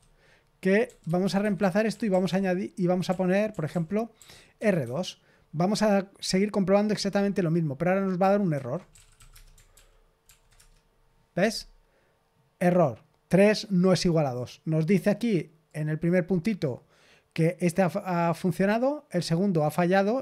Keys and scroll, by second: 0.5-5.0 typing, 8.6-9.6 typing, 9.7 ctrl+p, 10.2 ctrl+p, 10.5 Return.